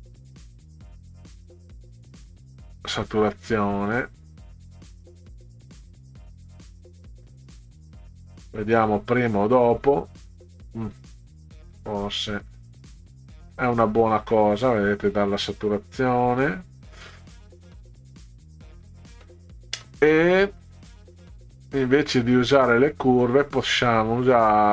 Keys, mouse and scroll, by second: 5.0-6.2 drag, 7.2 click, 11.2 drag, 13.4 click, 15.2-19.2 middle drag, 21.2 click.